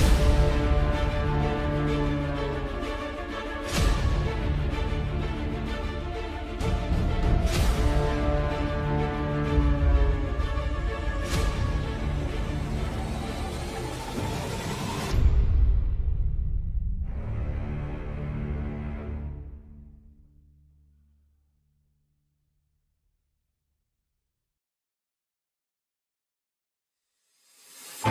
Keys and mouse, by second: 0.3 middle click, 1.0 click, 2.2 shift+middle click, 2.6-4.2 middle drag, 4.7 middle click, 5.8 click, 6.6 Tab, 7.8 ctrl+KP_7, 9.0 shift+click, 10.3 shift+click, 10.9 KP_3, 12.9 shift+middle click, 14.4 middle click, 19.8 ctrl+KP_7, 21.2 shift+middle click, 23.4 i.